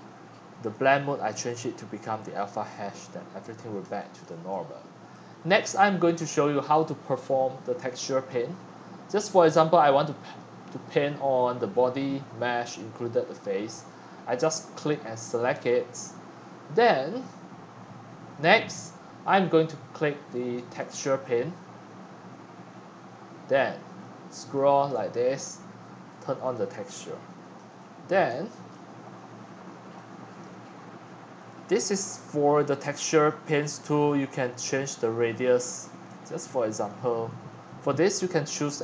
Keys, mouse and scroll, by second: 0.8-3.0 drag, 3.0 scroll down 1, 3.1 scroll up 2, 3.3 scroll down 1, 3.4-5.2 middle drag, 9.1 Tab, 9.6-10.4 drag, 10.4-11.7 middle drag, 13.9-15.1 right drag, 15.7 scroll, 16.1-16.5 scroll up 3, 16.5 middle click, 16.5 scroll, 16.6 middle click, 19.0-19.3 scroll down 1, 20.9 click, 21.6-23.3 middle drag, 23.3 click, 23.5 right click, 23.6 middle click, 23.9 right click, 24.0 middle click, 24.9 shift+right click, 24.9-26.5 shift+middle drag, 26.5 click, 26.7 right click, 27.0 middle click, 27.1-28.1 scroll down 4, 28.1-30.0 shift+middle drag, 31.5 right click, 31.9-32.5 middle drag, 34.6 middle click, 36.9-37.2 scroll, 37.4 click, 38.7-38.8 drag.